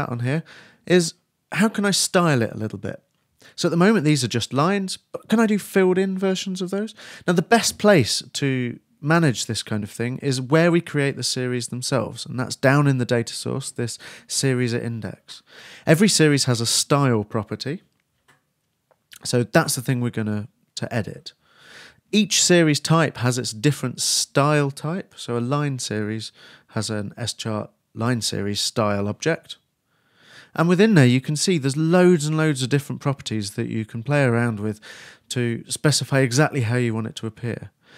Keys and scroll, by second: 36.9-37.9 typing.